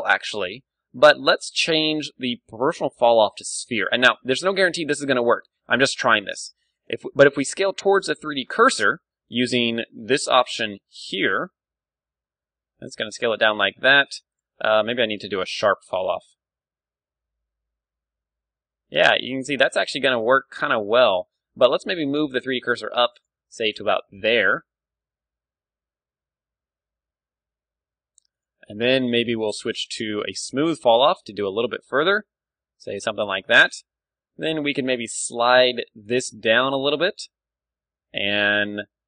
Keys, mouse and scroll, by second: 0.6-2.2 right drag, 1.5-3.4 drag, 4.1 s, 6.7-8.5 right drag, 10.2-11.9 drag, 11.5 s, 13.5-14.9 right drag, 14.3-16.1 drag, 16.2 s, 16.6 s, 20.3 right click, 20.8 middle click, 21.1-22.2 drag, 21.1 z, 21.3 a, 21.6 b, 22.2-23.2 middle drag, 22.6 shift+s, 23.7 a, 24.1 right click, 24.4-25.7 drag, 24.4 z, 24.7 s, 25.7-26.8 middle drag, 28.4-30.8 drag, 30.9 s, 33.2-35.2 drag, 33.7 a, 35.0-36.9 middle drag, 35.1 ctrl+e, 37.1-38.5 drag, 37.3 s, 38.7 ,, 39.0 click.